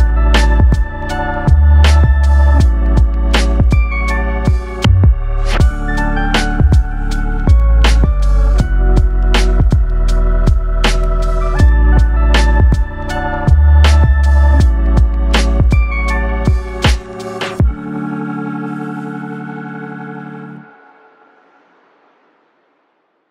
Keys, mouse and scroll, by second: 2.0 1, 3.0 click, 3.5 g, 4.2 click, 4.4 g, 5.8 click, 6.5 g, 6.7 click, 6.9 g, 9.8 click, 10.5 g, 12.2 click, 13.3 click, 13.5 g, 15.0 click, 15.2 g, 16.2 click, 16.4 g, 17.1 click, 17.2 g.